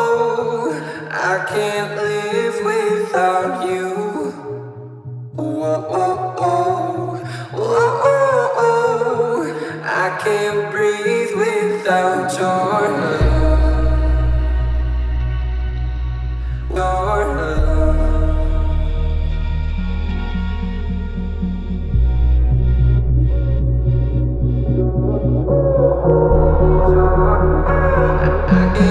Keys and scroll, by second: 2.8 space, 3.2 Escape, 4.3 h, 6.5 t, 18.2 space, 20.5 t, 21.8 1, 22.0 Return, 22.6 l, 23.9 space, 24.8 p.